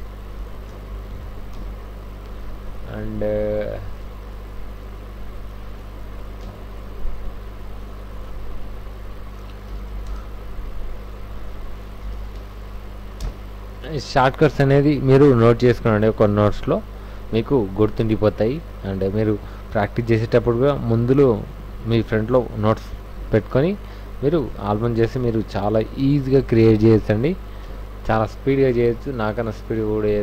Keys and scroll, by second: 0.4 w, 0.9 ctrl+shift+v, 1.5 ctrl+alt+shift+Tab, 4.6 Right, 6.4 alt+Tab, 9.7 alt+i, 9.9 alt+s, 10.1 alt+Return, 12.0 alt+i, 12.1 a, 12.4 c, 13.2 Return, 14.0 f, 19.1 super+u, 23.2 ctrl+a, 23.3 c, 23.5 w, 26.4 w, 26.9 v, 27.2 v, 27.6 Tab.